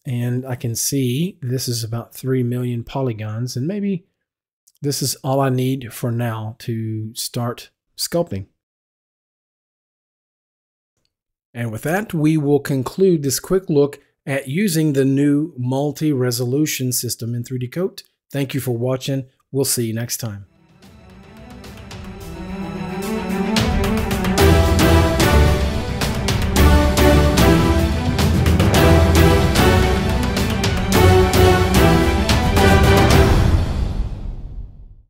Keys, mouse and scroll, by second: 7.3 click, 7.8 right click, 8.4 right click, 12.8 click, 16.6 click, 16.7 Down, 21.6 w.